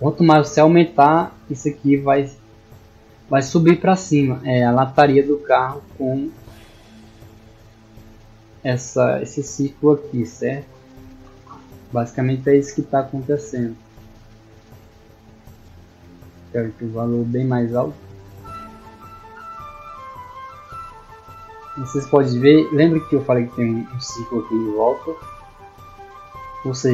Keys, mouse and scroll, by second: 0.7 d, 1.1-3.1 drag, 3.9 d, 4.3-8.4 drag, 9.1 d, 13.7 click, 14.6 click.